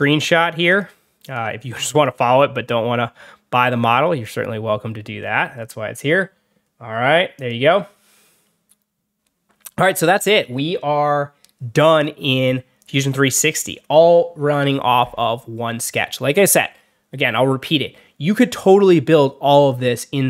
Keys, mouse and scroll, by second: 0.6 click, 1.1 click, 1.8 click, 4.1 click, 5.1 middle click, 7.2 click, 8.3 middle click.